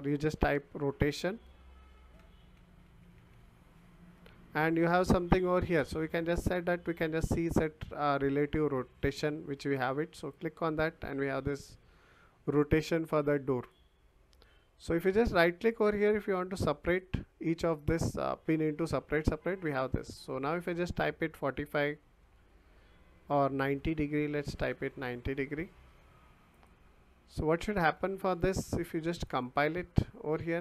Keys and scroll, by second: 0.4 BackSpace, 1.7-3.6 typing, 22.0 4, 23.8 BackSpace, 24.4 9, 24.7 0, 25.1 Return.